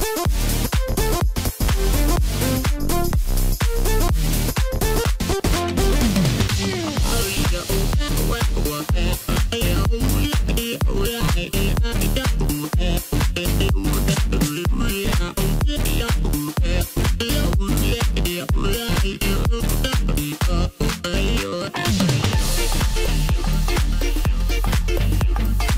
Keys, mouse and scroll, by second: 3.9 s, 8.8 s, 15.6 x, 17.4 click, 19.6 ctrl+z, 21.0-21.7 middle drag, 21.7 scroll up 1, 21.8-22.3 middle drag, 22.3-23.1 scroll up 1, 23.1 Tab, 24.2 click, 25.1 click.